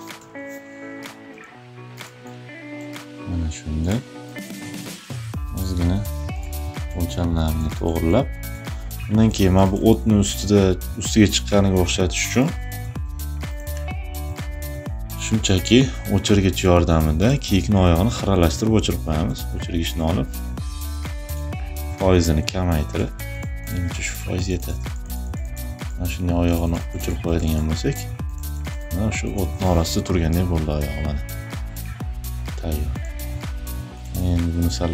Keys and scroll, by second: 8.8 space, 9.9 e, 18.8 e, 20.3 [.